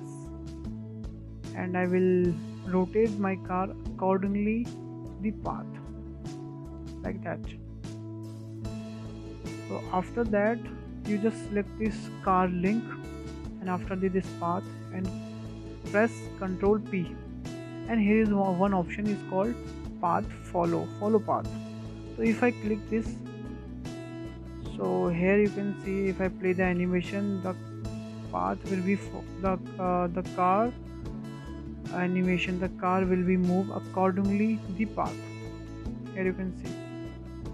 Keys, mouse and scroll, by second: 0.4-1.0 scroll down 7, 1.0-1.3 shift+middle drag, 1.3-2.2 scroll up 10, 2.2 shift+middle click, 3.0-3.4 drag, 3.4-4.7 shift+middle drag, 4.7 click, 6.5 scroll down 3, 6.8-7.1 shift+middle drag, 7.1-7.5 scroll down 5, 7.5-8.0 scroll up 4, 8.0-8.6 middle drag, 8.6 scroll up 1, 8.8-9.9 shift+middle drag, 9.9 click, 10.6 scroll down 1, 10.8-12.1 shift+middle drag, 12.1-12.4 scroll up 2, 12.4-13.1 shift+middle drag, 13.1 click, 14.5 shift+click, 17.5 ctrl+p, 24.3-24.7 scroll down 4, 24.7-26.2 shift+middle drag, 26.2 click, 27.5 space, 28.1-29.3 scroll down 4, 29.3 scroll down 3, 30.8-32.0 shift+middle drag, 32.0 space, 32.5-34.2 drag, 34.2 space, 36.3-37.3 scroll up 3.